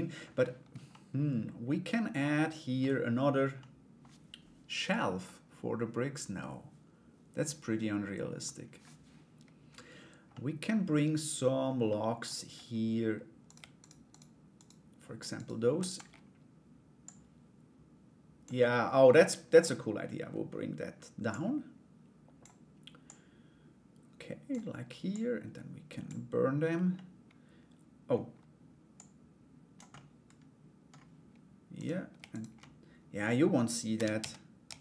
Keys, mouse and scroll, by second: 0.5 middle click, 1.8 middle click, 3.1 middle click, 4.8-8.0 middle drag, 9.9 middle click, 11.4 middle click, 13.0 right click, 13.4 shift+right click, 13.7 shift+right click, 14.1 shift+right click, 14.9 shift+right click, 15.3 shift+d, 16.6-18.0 drag, 18.2-20.8 middle drag, 20.8-24.1 drag, 24.7 click, 26.5-27.6 middle drag, 27.6 scroll down 1, 28.5 click, 29.5 middle click, 31.3 right click, 31.9 shift+right click, 32.2 middle click.